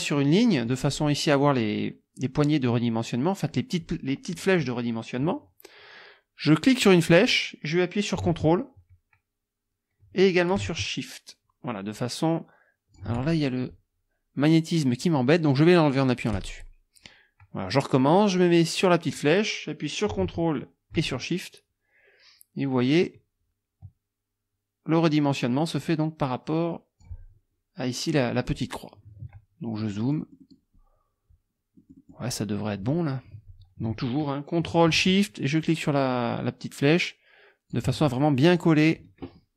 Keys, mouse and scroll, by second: 0.7 click, 6.6-13.2 drag, 16.4 click, 18.4-27.2 drag, 29.8 click, 31.8 click, 35.6 ctrl+shift+click, 38.5 ctrl+shift+click.